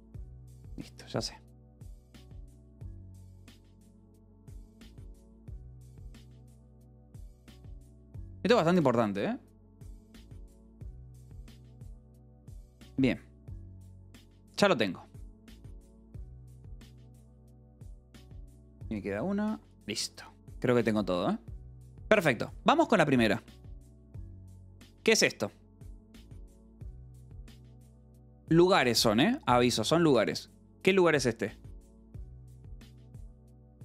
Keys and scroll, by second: 0.0-0.3 typing, 6.2-7.5 typing.